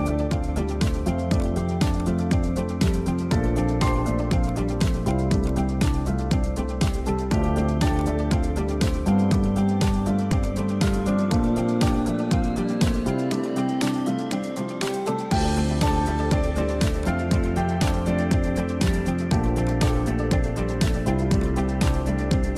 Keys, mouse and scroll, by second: 0.0 click, 0.6-1.3 middle drag, 1.3 click, 2.1 click, 2.3 scroll up 2, 2.6-2.9 middle drag, 2.9 scroll up 3, 3.2-3.8 shift+middle drag, 3.8-4.3 scroll up 1, 4.4-6.3 drag, 6.3 middle click, 6.7 scroll down 4, 6.8 middle click, 7.1-8.0 scroll up 3, 8.0 click, 8.4 middle click, 8.7 scroll up 4, 8.8-9.3 middle drag, 9.3 shift+click, 10.5 ctrl+p, 11.2 s, 13.6 `, 14.5 r, 15.3 g, 17.2 r, 18.2 g, 20.1-21.4 middle drag, 21.4 click, 21.9 h, 22.1 scroll down 3, 22.3-22.5 middle drag.